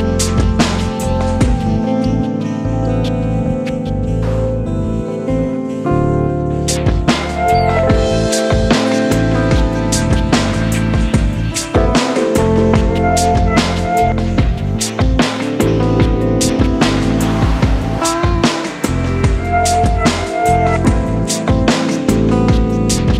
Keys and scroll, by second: 3.0 super+0, 3.3 super+0, 6.0 super+d, 7.3 super+space, 7.7 v, 9.6 e, 11.5 space, 12.7 space, 13.0 v, 13.7 s, 15.2 super+z, 16.9 v, 17.8 alt+s.